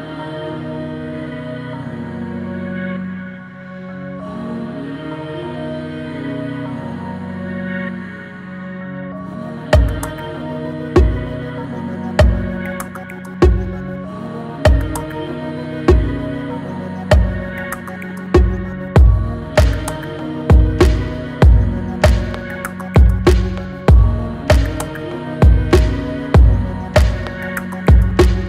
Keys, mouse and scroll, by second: 0.8 click, 1.3 click, 1.6 middle click, 2.2 shift+click, 2.6-3.7 middle drag, 3.7 e, 5.4-7.3 middle drag, 7.5-8.8 drag, 8.8 e, 13.6-14.4 scroll up 2, 13.7 middle click, 14.4 shift+middle click, 15.2 s, 16.5-18.0 middle drag, 18.0 scroll down 2, 18.3 middle click, 19.0 click, 19.6 x, 20.5 middle click, 21.3 scroll up 1, 21.3 click, 21.8 middle click, 22.3 scroll down 1, 22.6 middle click, 23.2 e.